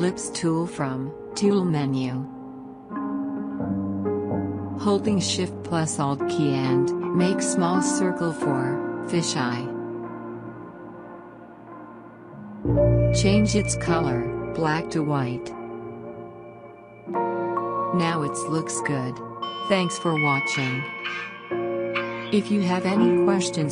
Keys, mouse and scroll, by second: 1.5 click, 3.9-11.1 drag, 11.8 click.